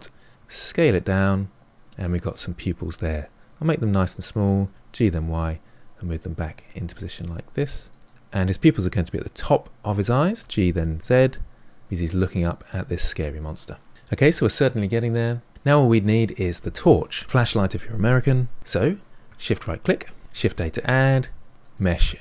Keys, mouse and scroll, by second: 0.3 s, 2.0-2.8 middle drag, 2.8 s, 4.6 g, 7.5-10.3 middle drag, 10.3 g, 13.9-15.5 middle drag, 19.4 shift+right click, 20.3 shift+a.